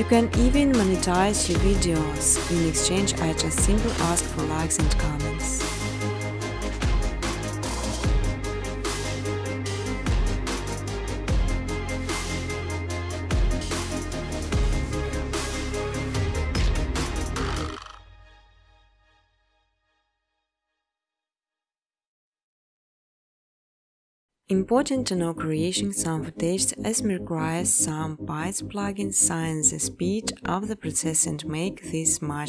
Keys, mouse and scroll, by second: 0.9-2.0 typing, 3.3 Tab, 3.4-4.1 typing, 5.7 middle click, 6.7 middle click, 6.8 middle click, 7.4-8.9 scroll, 8.9 scroll, 12.1-13.4 scroll, 13.4-15.0 scroll, 13.4 space, 15.0-15.5 scroll, 15.0 space, 15.5 middle click, 15.6 space, 15.8 scroll, 16.0 scroll down 1, 16.4-16.8 scroll, 16.5 space, 17.6 space, 20.9 click, 21.0 click, 21.7 scroll, 23.4 click, 23.9 click, 24.7 click, 25.4 click, 26.5-29.2 typing, 27.6 Tab, 32.0-32.4 typing.